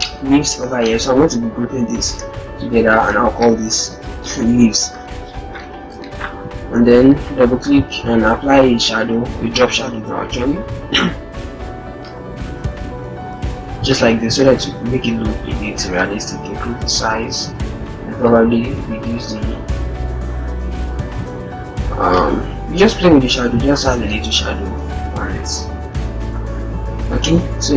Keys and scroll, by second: 1.5 ctrl+g, 3.5 shift+l, 24.3 ctrl+-, 26.3 0.